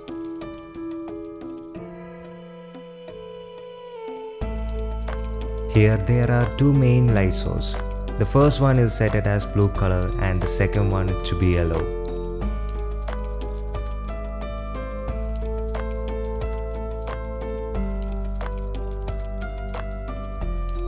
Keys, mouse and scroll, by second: 0.4 r, 4.9 KP_7, 6.0 r, 8.8-9.2 middle drag, 9.4-9.7 shift+middle drag, 9.8-10.1 drag, 10.7-11.0 drag, 11.4 shift+click, 12.9 r, 17.2-17.7 drag, 18.7 KP_Decimal.